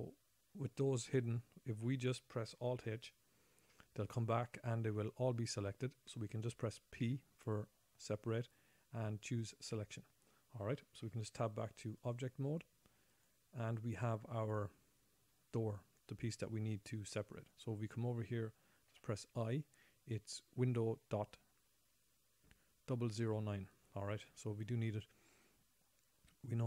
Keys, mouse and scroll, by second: 3.9 alt+h, 7.4 p, 11.5 Tab, 12.6 Tab, 13.6 click, 19.3 ..